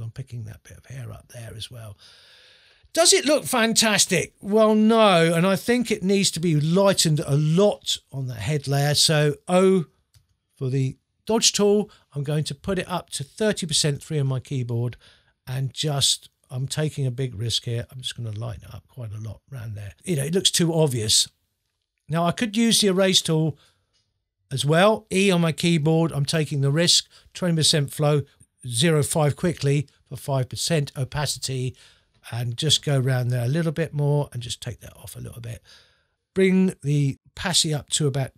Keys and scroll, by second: 10.1 o, 13.9 3, 25.8 e, 28.8 0.